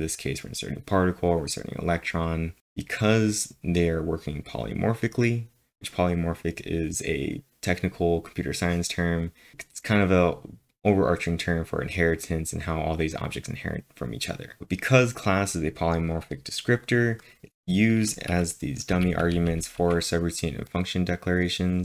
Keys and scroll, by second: 18.9-19.7 typing.